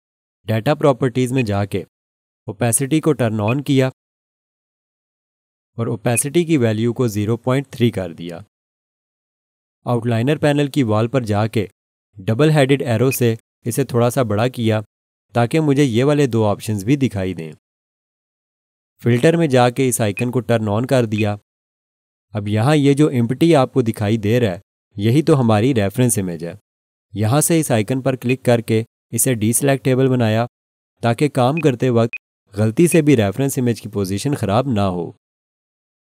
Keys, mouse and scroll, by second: 7.6-8.9 typing, 9.1 Return, 13.1 click, 20.1 click, 28.3 click, 31.5 click.